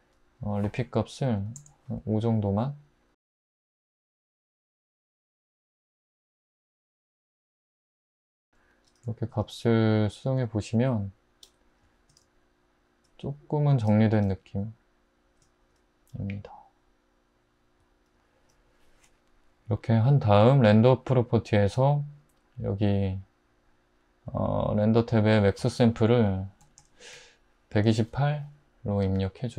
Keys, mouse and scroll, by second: 1.4 5, 1.6 Return, 7.4 click, 7.7-8.3 middle drag, 11.5-13.9 middle drag, 17.8-20.2 middle drag, 26.7-27.1 typing, 27.9 Return.